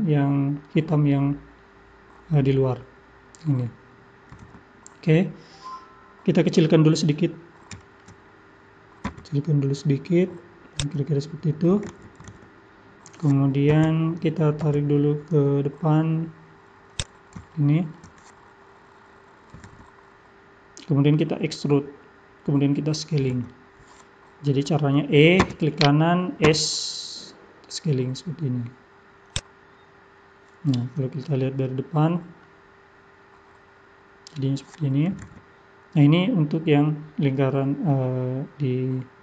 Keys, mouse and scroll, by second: 6.5-7.1 scroll up 1, 7.8 shift+middle click, 8.3-8.7 scroll up 1, 9.2 s, 13.7 g, 17.5 shift+middle click, 25.4 e, 26.4 s, 30.9-31.4 scroll down 2, 31.4 middle click, 32.1-32.5 scroll down 2, 32.5 middle click.